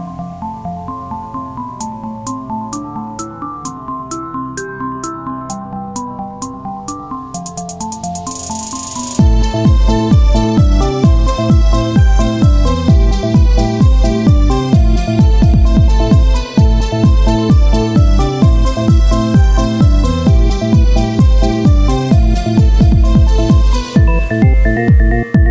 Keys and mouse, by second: 0.9-2.5 drag, 2.5 KP_1, 2.9-6.5 z, 10.8 z, 11.5 Tab, 12.1 ctrl+Tab, 16.2 z, 18.7 KP_1, 19.0 z, 19.9 shift+d, 22.0 r, 23.1 o, 24.0 p, 24.6 Tab, 25.3 click.